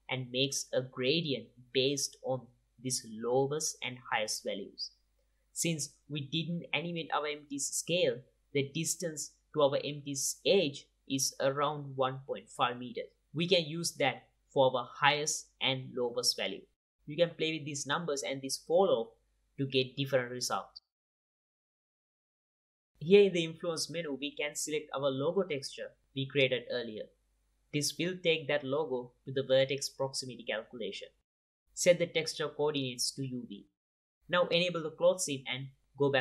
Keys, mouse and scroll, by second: 0.1-1.5 drag, 3.9-5.0 drag, 10.5 ctrl+Tab, 11.4 click, 12.5-13.8 drag, 14.0 ctrl+Tab, 14.8 click, 15.7 click, 17.0-17.4 drag, 21.2 click, 21.6 click, 23.9-25.6 drag, 27.3-28.2 drag, 31.8-33.2 drag, 33.6 click, 34.8-36.2 drag.